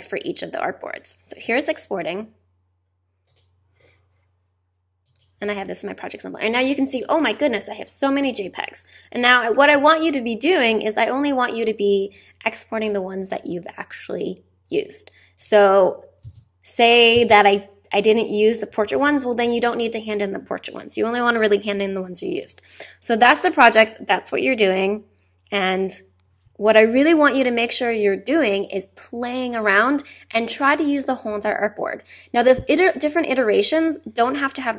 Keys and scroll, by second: 16.2 space, 18.7 Down, 19.4 Up.